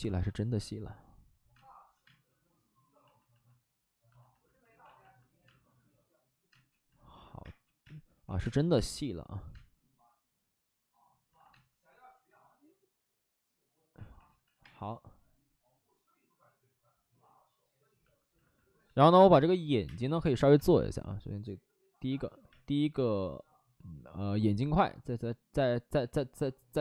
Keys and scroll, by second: 0.1 space, 1.5 space, 1.8 ctrl+z, 2.0 space, 4.7 ctrl+z, 5.4 space, 6.4-8.3 typing, 9.5 space, 11.3 alt+s, 11.4 space, 11.8 1, 13.9 ctrl+z, 14.1 ctrl+z, 14.2 ctrl+z, 14.4 ctrl+z, 14.5 space, 18.3 alt+s, 19.7 s, 19.8 space, 20.5 space, 22.0 ctrl+z, 22.4 space, 22.9 space, 23.1 space, 25.9 ctrl+z.